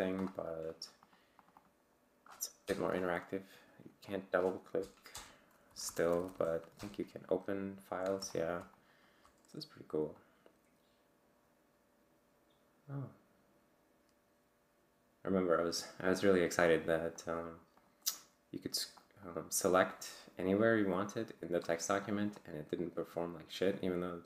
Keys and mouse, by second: 1.0 click, 1.4 click, 2.6 Return, 4.1 click, 5.1 Return, 5.7 Down, 6.8 Return, 8.3 click, 8.7 click, 10.2-18.0 drag, 18.1 click, 22.1 click, 22.4-24.2 drag.